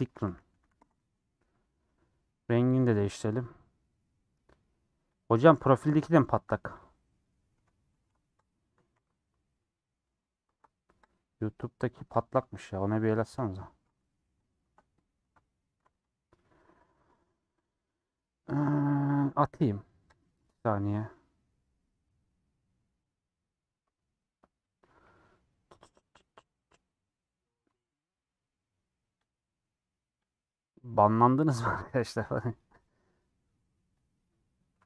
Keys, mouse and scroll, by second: 0.8 e, 6.7 click, 8.5 ctrl+l, 9.1 z, 9.5-11.1 middle drag, 11.1 ctrl+l, 12.2 shift+click, 13.0 shift+click, 14.5 shift+click, 15.9 ctrl+l, 16.4-18.3 middle drag, 18.3 scroll down 2, 18.5 middle click, 20.2-34.8 middle drag.